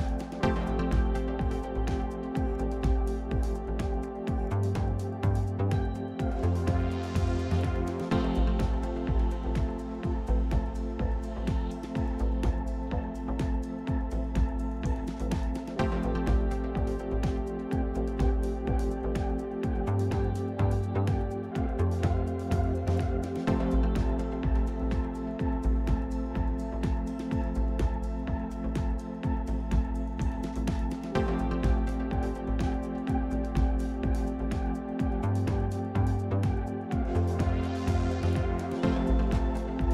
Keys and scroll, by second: 7.5-8.5 typing.